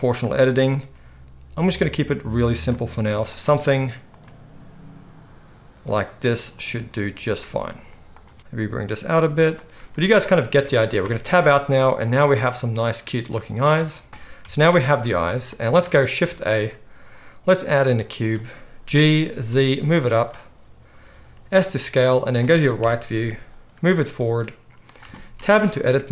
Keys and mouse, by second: 0.7 middle click, 0.9-2.5 right drag, 0.9 g, 2.5 middle click, 2.6-7.4 right drag, 2.8 g, 4.2 g, 6.5 click, 6.5 middle click, 7.2 click, 7.2 middle click, 7.4 g, 7.4-9.4 drag, 10.2 click, 11.0 Tab, 11.0-11.5 right drag, 11.5-15.5 middle drag, 14.2 Tab, 14.4 KP_1, 15.5 shift+right drag, 15.6 shift+middle click, 15.7-16.1 shift+right drag, 16.2 shift+a, 18.8 g, 21.0 s, 22.7 KP_3, 23.7 g, 24.8-26.1 shift+drag, 25.5 Tab, 25.8 z.